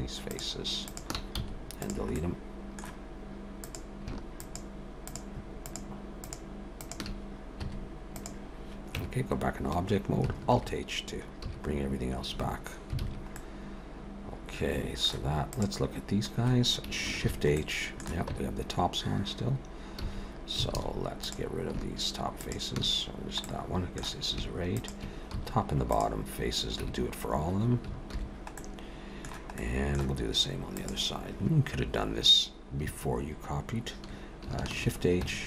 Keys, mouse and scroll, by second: 0.3 click, 0.9 shift+click, 1.4 x, 2.1 middle click, 3.6 click, 4.4 shift+click, 4.9 shift+click, 5.6 click, 6.6 shift+click, 6.8 shift+click, 7.6 x, 8.2 shift+click, 9.0 Tab, 10.6 alt+h, 11.4 a, 11.7-12.3 scroll down 1, 12.3 scroll down 2, 13.0 alt+a, 13.4 middle click, 15.4 click, 17.2 shift+h, 17.6 middle click, 18.3 Tab, 20.0 a, 20.7 alt+a, 21.2 click, 22.4 shift+click, 23.4 middle click, 24.6 shift+click, 25.3 x, 26.8 Tab, 28.1 alt+h, 28.6 middle click, 29.6 middle click, 30.8 click, 34.8 shift+h, 35.2 Tab.